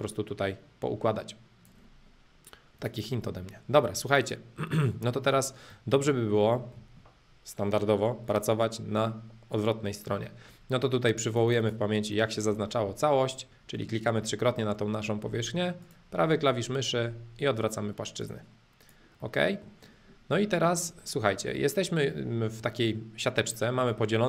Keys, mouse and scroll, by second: 0.0-2.0 drag, 2.8-4.8 drag, 4.8-8.6 middle drag, 11.2 click, 12.2-14.2 middle drag, 15.8-17.8 right drag, 18.2-19.2 drag, 19.2 middle click, 20.4 middle click, 21.6 middle click.